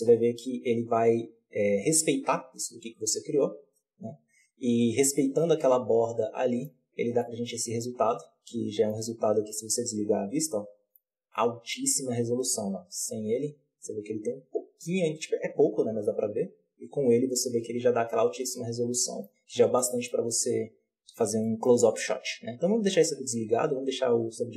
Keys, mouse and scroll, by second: 0.3-1.7 scroll down 1, 3.9-4.8 scroll up 1, 4.8 scroll down 1, 5.1-6.5 middle drag, 6.5-6.9 scroll up 1, 6.9 scroll down 1, 7.1-10.0 middle drag, 10.0 click, 10.4-10.9 middle drag, 10.9-11.2 scroll up 3, 11.2-13.1 middle drag, 13.1 click, 16.6 click, 17.6-18.5 scroll down 3, 18.5-18.9 scroll up 2, 18.9 middle click, 19.3-19.7 scroll down 3, 19.7-22.8 middle drag, 22.8 click, 23.5-24.5 scroll up 3.